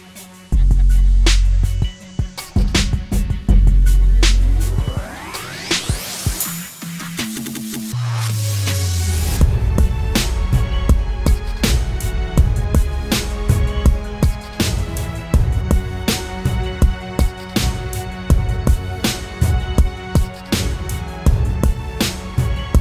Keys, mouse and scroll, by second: 0.0 alt+shift+click, 3.4 Return, 4.0 Down, 4.3 Down, 4.7 ctrl+t, 5.6 alt+shift+click, 8.0 Return, 8.7 Up, 10.1 Down, 10.5 Down, 11.1 Left, 11.4 Left, 12.6 Right.